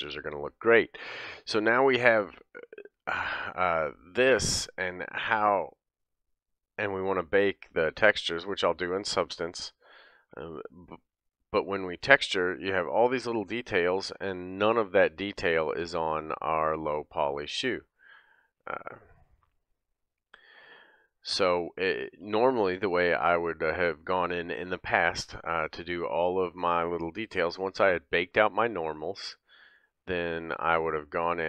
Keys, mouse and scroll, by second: 6.4 click, 8.6 click, 9.1 click, 9.7 click, 10.7-12.8 scroll up 3, 11.0-15.8 middle drag, 15.8 click, 15.9 middle click, 16.6 click, 16.7 middle click, 17.2 click, 17.3-19.7 middle drag, 19.7 click, 19.7-29.2 middle drag, 20.5-21.1 scroll down 3, 21.0-22.8 scroll up 2, 24.7-27.7 scroll up 1, 29.2 click, 30.2 click.